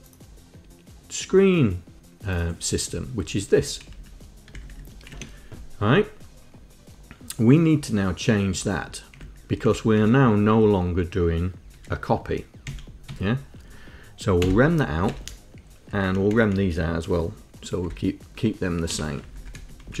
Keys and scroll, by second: 3.1 Down, 3.5 Down, 3.8 Down, 4.1 Up, 4.9 shift+Down, 8.7 Up, 8.9 Down, 9.3 Down, 9.7 Up, 9.9 Down, 10.2 Home, 11.9 Home, 12.9 End, 13.3 Home, 14.7 l, 15.2 Down, 15.3 Up, 16.3 Up, 16.5 Left, 17.2 Right, 18.0 l, 19.5 Left, 19.6 l, 19.7 Down.